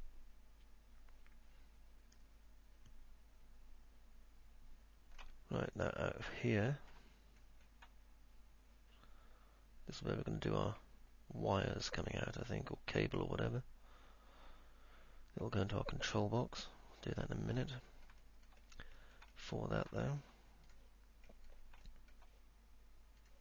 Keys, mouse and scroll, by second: 0.0-5.5 alt+middle drag, 6.6-7.1 alt+middle drag, 7.6 middle click, 8.0-17.8 alt+middle drag, 18.0 middle click, 18.5 alt+middle click, 19.1 middle click, 19.6 alt+middle click, 20.1 alt+middle click, 20.8 click, 22.0 alt+middle click.